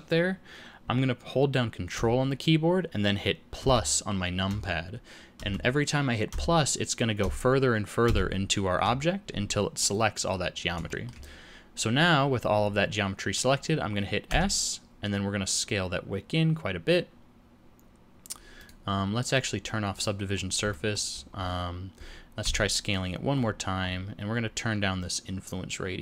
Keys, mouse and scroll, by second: 3.5 ctrl+KP_Add, 4.4 ctrl+KP_Add, 5.3 ctrl+KP_Add, 6.2 ctrl+KP_Add, 7.1 ctrl+KP_Add, 8.0 ctrl+KP_Add, 9.7 middle click, 10.3-10.7 scroll down 1, 10.8 shift+middle click, 11.9 scroll up 1, 14.3 s, 19.9 click, 20.7 shift+middle click, 22.4 s.